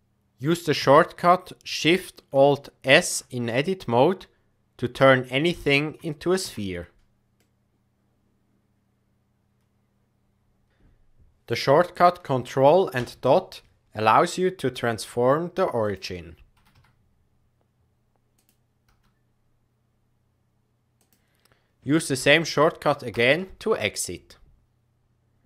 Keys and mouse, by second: 0.7 Tab, 2.8 alt+shift+s, 6.4 Tab, 7.4-10.7 middle drag, 13.2 ctrl+., 14.8 g, 16.5 r, 18.8 s, 23.1 ctrl+..